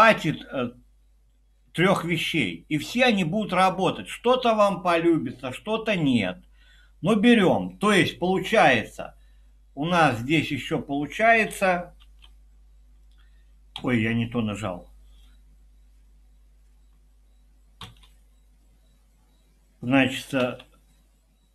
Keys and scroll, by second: 12.0 p, 13.7 Escape, 17.8 typing, 20.4 typing.